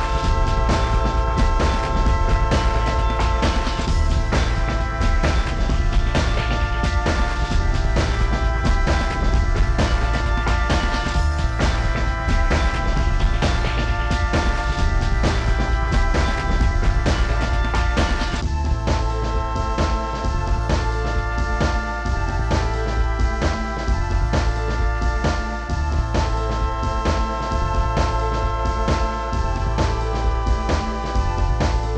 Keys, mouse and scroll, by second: 3.7 middle click, 3.7 scroll down 7, 3.8 middle click, 3.9 scroll up 8, 4.4 Up, 4.6 double click, 5.6 9, 5.8 space, 5.8 middle click, 5.9 m, 6.2 scroll down 10, 6.6 shift+click, 6.7 middle click, 6.9 scroll down 1, 6.9 s, 7.1-7.7 scroll up 30, 7.7 y, 13.7 middle click, 13.8 space, 13.9 scroll down 10, 14.1 middle click, 14.2 shift+middle click, 14.3 shift+middle click, 14.5 y, 14.7 scroll down 21, 15.0-15.6 scroll up 45, 15.6 double click, 15.6 double click, 15.9 q, 16.2 Up, 16.3 ctrl+click, 16.7 Return, 16.8 middle click, 16.9 scroll up 6, 17.7 Right, 17.9-19.5 typing, 18.2 middle click, 18.3-18.7 scroll down 29, 19.2 scroll up 21, 19.6 middle click, 19.8 scroll up 5, 22.9 middle click, 23.0-23.7 scroll down 12, 23.1 space, 23.3 middle click, 23.5 shift+middle click, 23.7 middle click, 23.8 middle click, 24.0 shift+middle click, 24.0 middle click, 24.2 middle click, 24.3 shift+middle click, 24.5 scroll up 5, 24.6 middle click, 24.8 shift+middle click, 25.0 double click, 25.1 double click, 25.3 m, 26.1 shift+click, 26.2 middle click, 26.4 shift+middle click, 26.5 m, 26.7 scroll up 1, 27.0 middle click, 27.2 scroll down 4, 27.3 s, 29.1 middle click, 29.3-29.6 scroll up 21, 29.4 m, 29.8 shift+click, 30.3 middle click, 30.4 right click, 30.5 click, 30.5 middle click, 30.8 shift+middle click, 30.9 middle click, 30.9-31.6 scroll down 25, 31.2 middle click, 31.6 s.